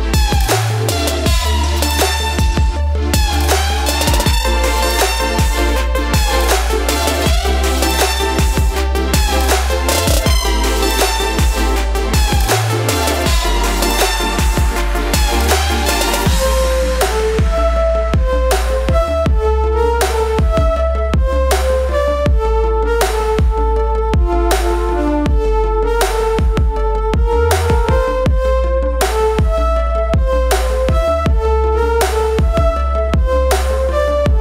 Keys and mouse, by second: 0.9 shift+Left, 6.4 Left, 7.5 click, 10.1 right click, 11.2 click, 13.3-17.4 drag, 18.4 right click, 20.7 click, 22.9 ctrl+j, 24.1 click, 25.8 shift+Down, 27.9 ctrl+t, 28.8 right click, 29.8 click, 29.8 typing, 31.5 shift+Down, 32.4 Down, 33.5-34.2 typing.